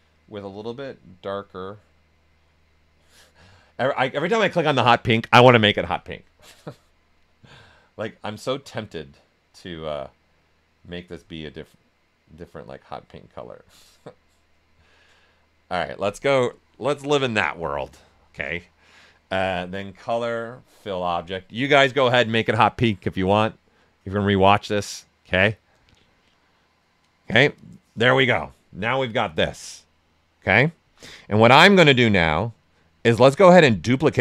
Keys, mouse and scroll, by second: 0.5 click, 6.4-16.9 drag, 20.0 click, 29.1 click, 29.3 shift+f, 31.9-34.2 drag.